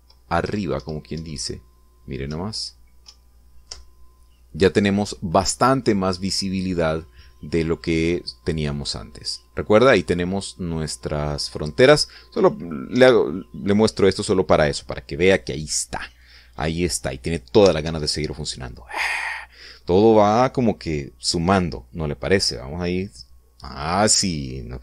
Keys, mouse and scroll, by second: 0.1 Left, 1.3 Up, 3.2 Left, 4.0 Right, 4.6 Up, 13.8 Escape.